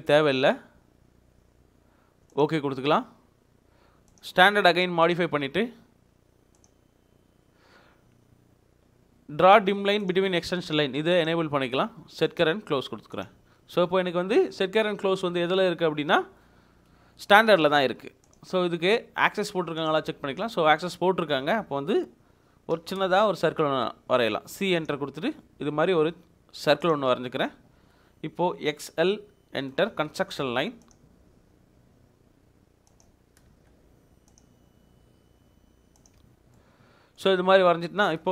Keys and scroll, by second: 22.7 c, 23.0 space, 27.2 Escape, 27.6 Escape, 27.7 Escape, 28.7-29.9 typing, 33.0 Escape, 34.4 space, 36.2 Escape.